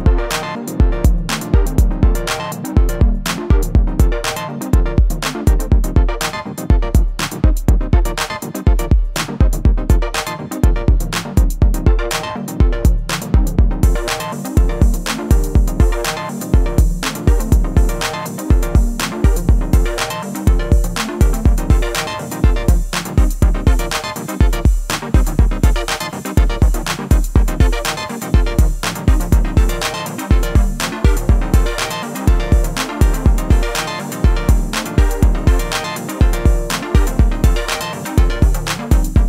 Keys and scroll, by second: 2.5 ctrl+r, 11.8 ctrl+r, 18.9 ctrl+r, 23.1 ctrl+r, 29.7 ctrl+r, 33.7 ctrl+r, 37.0 ctrl+r.